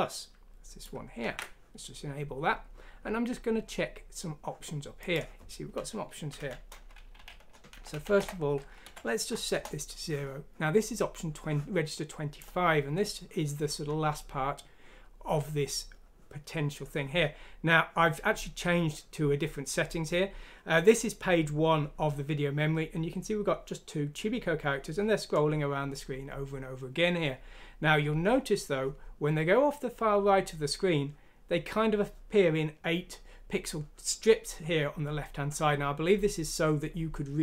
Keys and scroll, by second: 1.2 ctrl+q, 6.3 Home, 7.1 ;, 7.9 ;, 8.8 F6, 9.5 Return.